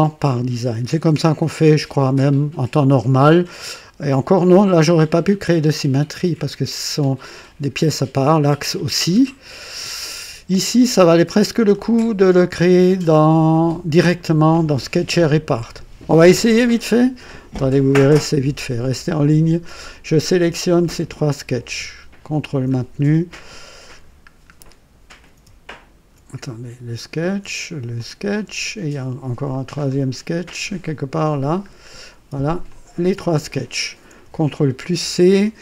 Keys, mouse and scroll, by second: 10.5-13.1 drag, 13.2 right click, 20.8 click, 22.9 ctrl+scroll down 2, 23.9 ctrl+click, 24.4 ctrl+scroll down 2, 28.0 ctrl+click, 29.4 click, 29.8 scroll down 1, 31.1 click, 31.7 scroll down 1, 32.7 ctrl+click, 34.7 ctrl+c.